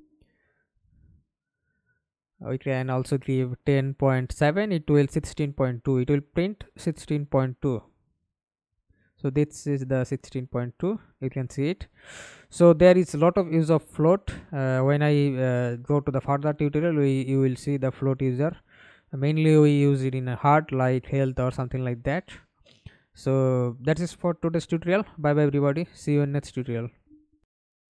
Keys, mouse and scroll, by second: 1.4 Right, 1.7 BackSpace, 2.5 7, 2.8-5.3 Return, 5.4 middle click, 6.1 F11, 6.7 alt+p, 10.1 Escape, 11.3 F11, 27.4 alt+F9.